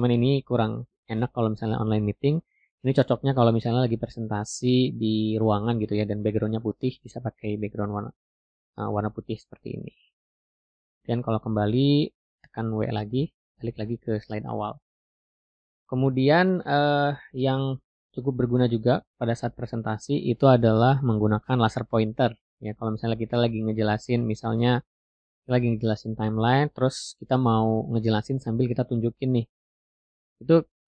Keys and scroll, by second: 0.0 w.